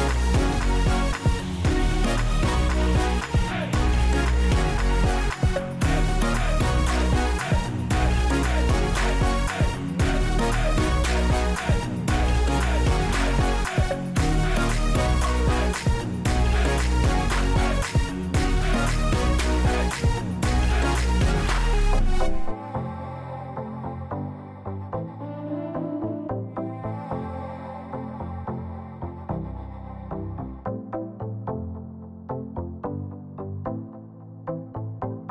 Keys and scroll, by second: 0.5 ctrl+d, 23.6 ctrl+shift+f, 34.6 ctrl+a, 35.0-35.3 typing.